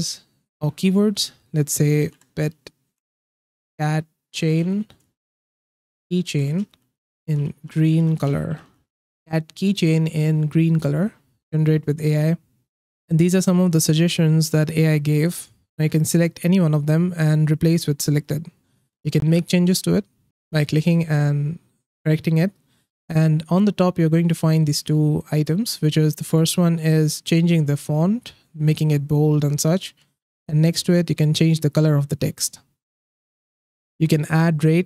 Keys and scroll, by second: 1.7-9.3 typing.